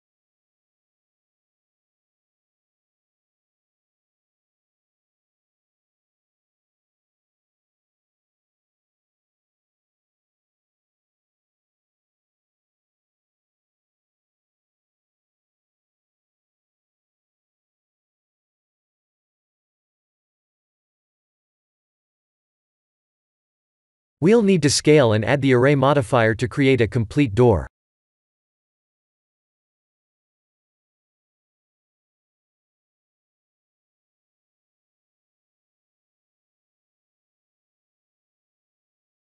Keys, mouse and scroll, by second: 0.9 KP_1, 1.3 KP_7, 1.8 KP_1, 3.0 KP_1, 3.9 s, 6.6-7.0 scroll up 3, 7.0 shift+middle click, 7.9 g, 11.0 shift+z, 12.2 middle click, 12.3 middle click, 12.8 middle click, 14.0 middle click, 15.9 g, 20.3 middle click, 21.4 KP_1, 21.7 shift+z, 22.3 middle click, 22.5 middle click, 22.7 middle click, 23.0 middle click, 23.2 middle click, 23.3 middle click, 23.4-24.4 middle click, 24.1 middle click, 24.2 middle click, 25.9 KP_1, 26.9 s, 31.8 g, 38.6 click.